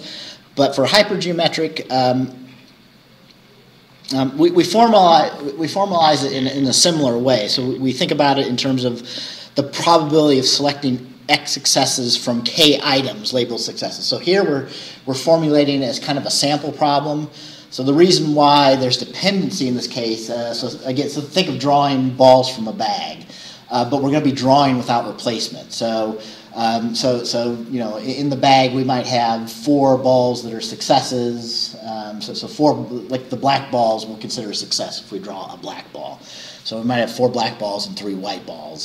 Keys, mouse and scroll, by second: 3.2 scroll down 2.